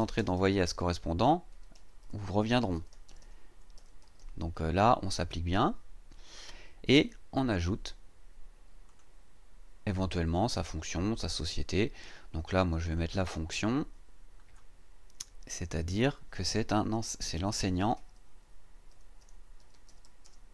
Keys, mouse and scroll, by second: 0.0-4.6 typing, 8.9 click, 12.8 click, 17.4-20.5 typing.